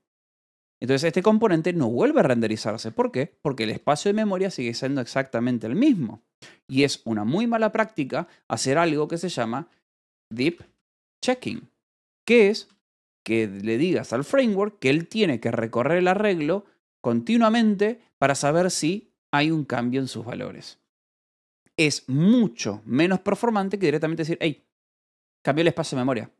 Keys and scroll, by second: 0.6 h, 1.6 shift+v, 2.8 Escape, 3.1 k, 4.2 shift+v, 6.4 Escape, 8.3-13.1 typing, 14.8 Escape, 18.1 k, 19.2 shift+v, 21.2 Escape, 23.5-24.9 typing.